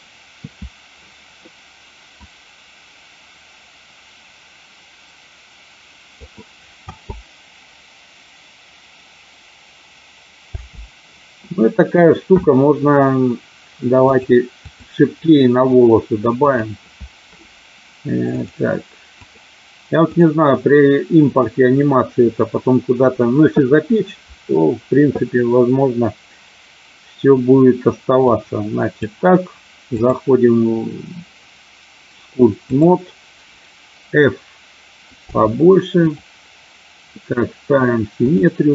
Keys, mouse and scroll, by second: 2.3-6.2 drag, 6.7 space, 10.5 space, 14.1 click, 16.4 click, 18.3 click, 20.0 click, 28.3 click, 29.9-32.9 drag, 35.1 f.